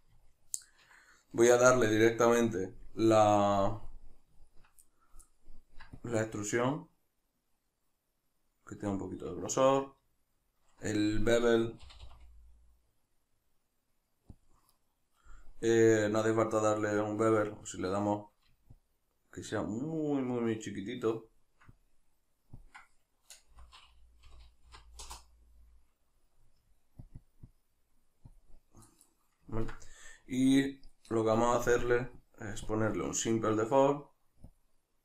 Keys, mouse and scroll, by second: 0.0 click, 0.2-6.0 ctrl+middle drag, 6.0 shift+click, 11.2-14.5 ctrl+middle drag, 11.8 g, 14.5 click, 18.7-29.6 shift+drag, 25.1 Return, 29.6-31.8 ctrl+middle drag, 31.8-35.0 drag.